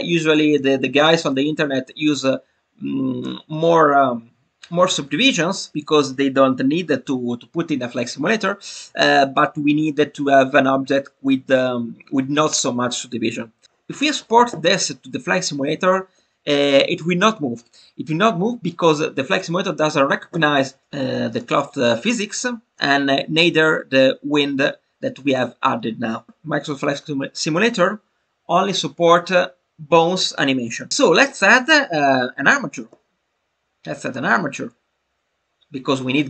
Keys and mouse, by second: 0.5-13.9 drag, 13.6 Tab, 34.0-36.2 drag.